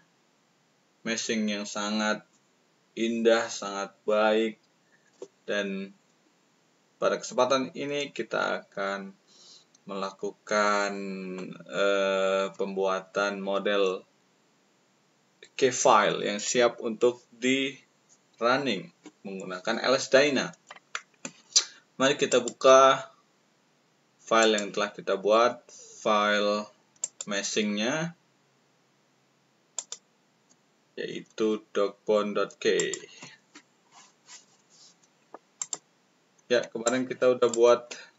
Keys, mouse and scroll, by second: 22.2 click, 24.3 click, 26.9 click, 29.8 click, 32.7 click, 35.5 click, 36.8 ctrl+click.